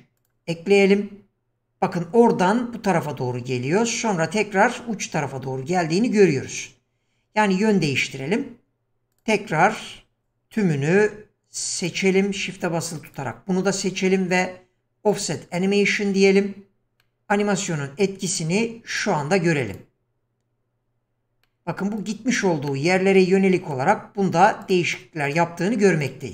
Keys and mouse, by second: 1.4-8.7 drag, 10.2 click, 11.0 q, 16.7 click, 17.0-17.6 middle drag, 19.7 click, 21.4-22.1 middle drag, 22.7-23.8 middle drag, 24.6 click, 25.3 click, 26.0 click.